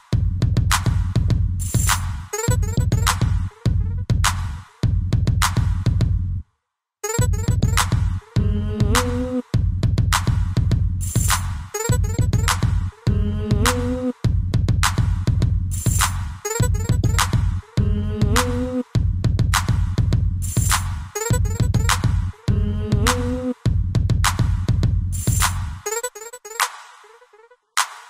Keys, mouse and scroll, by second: 0.5 shift+click, 1.7 b, 1.9 click, 3.0-3.4 scroll down 3, 3.8 middle click, 4.3 ctrl+c, 5.0 Down, 5.2 Down, 6.2 scroll up 2, 7.4 click, 7.6 click, 8.0 scroll down 2, 8.8 Up, 9.2 Down, 9.4 Down, 11.9 middle click, 12.9 ctrl+v, 13.5 middle click, 13.9-14.2 scroll up 3, 14.7 a, 15.7 click, 18.0 b, 18.5 Escape, 19.1 c, 19.5 click, 22.1 Escape, 24.9 i, 26.1 Escape, 28.0 click.